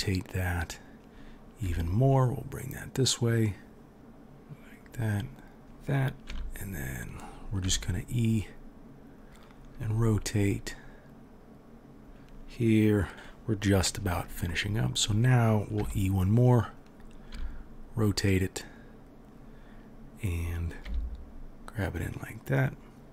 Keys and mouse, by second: 1.6 g, 5.6 g, 6.3 e, 7.6 r, 9.9 g, 15.7 e, 17.3 r, 20.8 g.